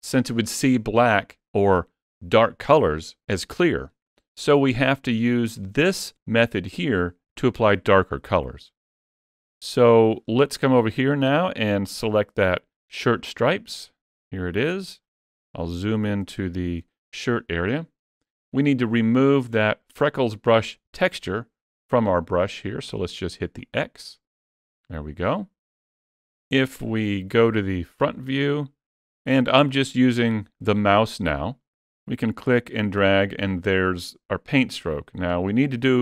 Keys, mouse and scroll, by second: 8.9 scroll down 1, 9.4 shift+middle click, 11.0 click, 14.8-15.2 scroll up 4, 15.2 shift+middle click, 16.1 shift+middle click, 19.4 click, 26.2 KP_1, 27.9-28.2 scroll up 2, 28.3 shift+middle click, 32.1 click.